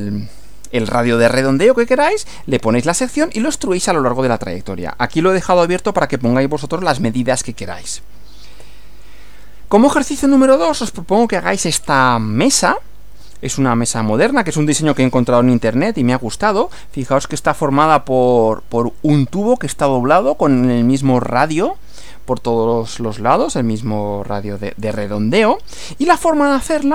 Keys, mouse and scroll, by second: 8.6 Right.